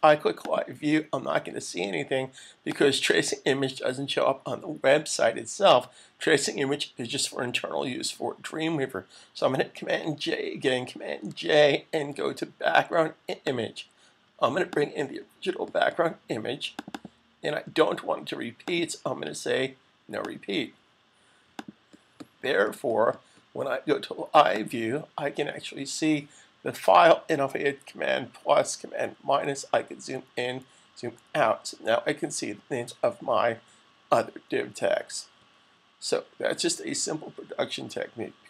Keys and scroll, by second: 11.2 super+j, 28.0 super+=, 29.0 super+=, 30.4 super+-, 30.9 super+-, 32.7 super+=, 33.4 super+-, 34.2 super+=, 34.8 super+-, 35.1 super+-, 36.2 super+=, 37.1 super+=.